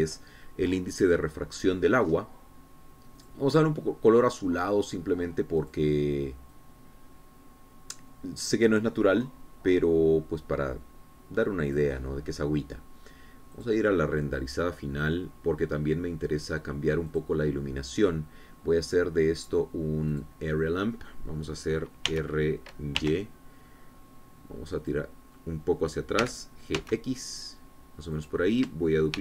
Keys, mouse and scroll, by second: 0.5 KP_Enter, 2.9-3.5 scroll up 3, 4.1 click, 6.6 click, 7.5-12.9 drag, 14.5 click, 16.2 middle click, 16.7 click, 18.1 click, 21.1 click, 23.0 r, 24.0 y, 25.7 click, 27.2 g, 27.7 x, 29.1 click.